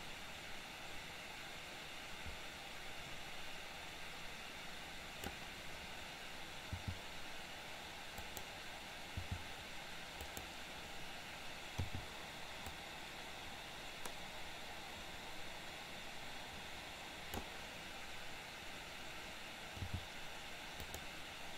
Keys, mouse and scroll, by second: 6.8 g, 9.1 g, 11.9 i, 12.9-17.6 drag, 19.9 g.